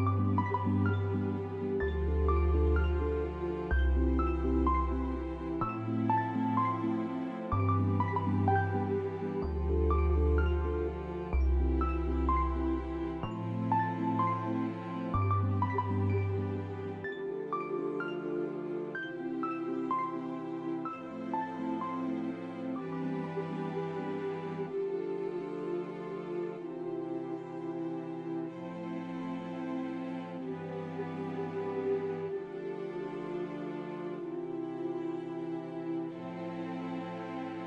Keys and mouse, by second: 7.3 click, 8.3 click, 8.7 shift+middle click, 9.7-10.7 drag, 10.9 shift+a, 13.9 s, 15.1-16.5 drag, 17.3 e, 19.6 middle click, 19.6 g, 20.1 e, 20.5 Tab, 21.1 a, 24.0 e, 25.5 s, 27.3 s, 29.2 click, 29.2 right click, 30.4 e, 32.4 click, 32.4 right click, 34.1 e, 36.9 middle click.